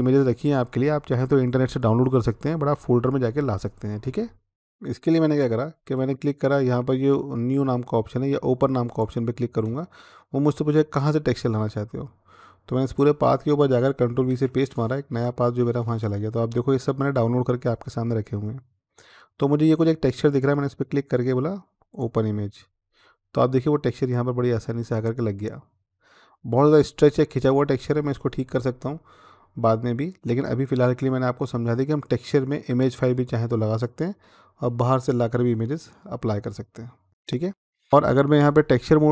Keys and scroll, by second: 4.5 ctrl+c, 14.1 ctrl+v, 14.9 Return.